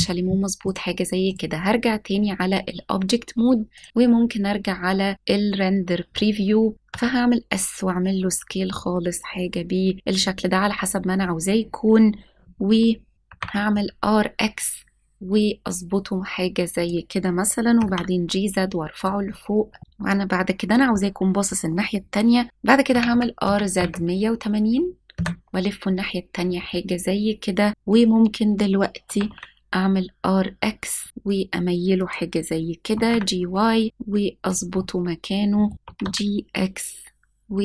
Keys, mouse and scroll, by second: 0.6-1.3 drag, 2.0-3.8 scroll down 1, 3.8 click, 6.7 click, 6.7 scroll up 1, 6.8 s, 10.1-10.5 drag, 10.5-11.2 scroll up 2, 11.2-11.6 scroll down 1, 13.1 right click, 13.2 r, 16.7-17.7 drag, 16.7 x, 17.7 g, 17.8 z, 18.9 click, 19.2-19.6 scroll up 1, 19.7 shift+middle click, 19.8-20.4 scroll down 2, 26.9 KP_Enter, 26.9 typing, 29.0 r, 29.2 x, 31.9 click, 32.9 g, 33.0 y, 34.4 click, 34.7 scroll up 1, 34.7-35.6 middle drag, 35.8 g, 36.0 x.